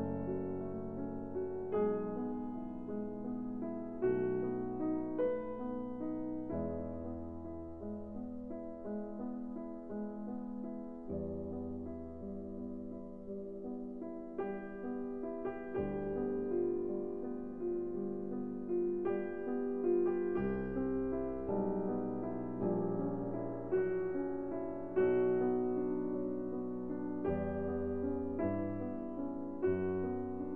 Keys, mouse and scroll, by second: 2.4 KP_Decimal, 5.4 a, 6.0-7.9 middle drag, 9.2 middle click, 10.9-12.5 drag, 11.9 KP_Decimal, 13.9 middle click, 15.2 KP_1, 19.8-21.4 middle drag, 22.8-27.0 drag, 27.0-30.2 middle drag, 30.2-30.5 drag.